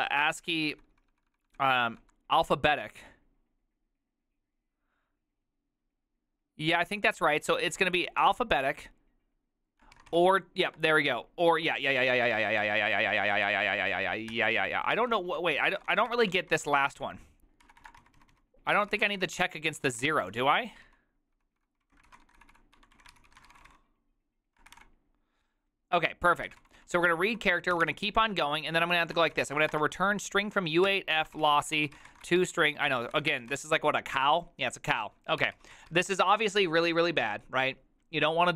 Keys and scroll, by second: 0.2 ctrl+n, 0.6 ctrl+n, 0.8 ctrl+n, 1.0 ctrl+n, 8.3 ctrl+y, 9.9-10.9 typing, 15.1 ctrl+c, 15.2-25.3 typing, 26.5-33.6 typing, 35.3-36.5 typing.